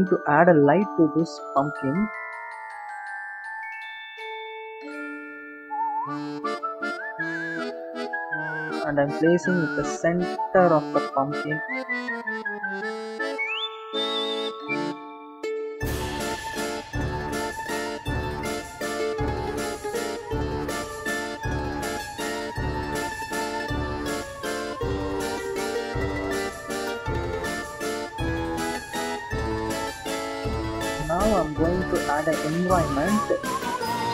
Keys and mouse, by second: 0.0 shift+a, 5.0-6.0 drag, 7.2 click, 8.8 click, 11.5 click, 14.5 click, 17.0 click, 18.9-20.5 drag, 22.5-28.0 drag, 24.9 BackSpace, 30.7 click.